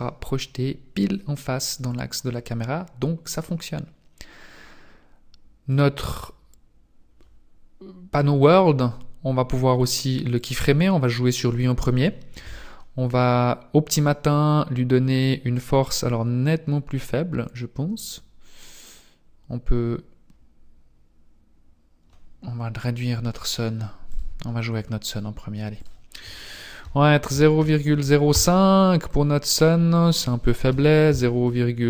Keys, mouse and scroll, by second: 5.7 click, 10.3 click, 15.7 click, 24.1 click, 25.7 click, 29.9 click.